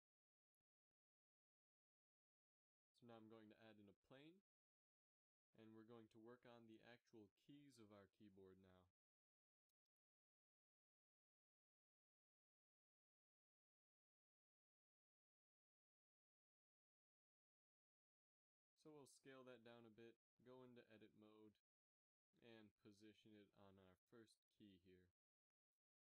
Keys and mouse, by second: 0.2 KP_7, 1.8 Tab, 2.8 a, 3.8 shift+a, 5.8 z, 6.8 KP_3, 8.2 g, 12.2-12.7 middle drag, 12.9 z, 14.5 KP_Divide, 16.9 KP_7, 17.2 z, 18.2 s, 21.0 Tab, 22.2 g.